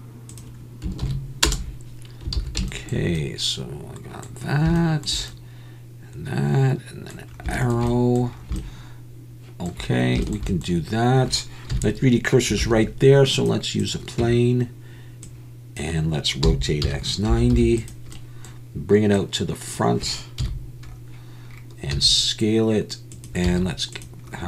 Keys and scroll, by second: 2.4 alt+a, 11.7 KP_1, 12.6 shift+a, 14.2 Tab, 16.4 r, 16.8 x, 17.3 9, 17.5 0, 20.4 KP_1, 21.9 s, 23.4 z.